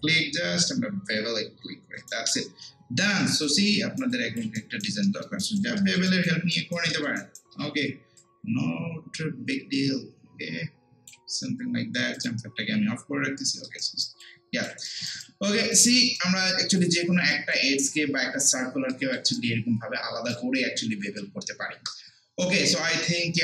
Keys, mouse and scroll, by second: 2.7 scroll down 1, 2.9 scroll up 1, 3.2 alt+click, 3.7 alt+right click, 4.1 alt+click, 4.6 alt+right click, 5.1 alt+middle click, 5.4 alt+right click, 5.8 alt+middle click, 6.1 alt+right click, 6.9 alt+middle click, 7.2 alt+right click, 8.2-13.5 drag, 13.8 alt+right click, 14.2 alt+click, 15.2 alt+click, 15.9 alt+right click, 17.0 alt+click, 17.6 alt+right click, 18.9 alt+middle click, 19.4-23.4 alt+right drag.